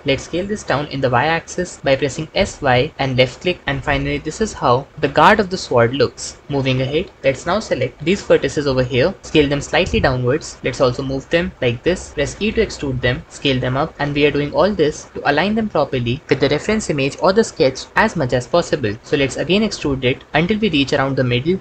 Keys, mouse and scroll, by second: 0.0 s, 0.8 y, 4.9 Escape, 6.6 KP_1, 9.5 s, 10.6 g, 12.2 e, 13.2 s, 15.1 g, 19.4 e.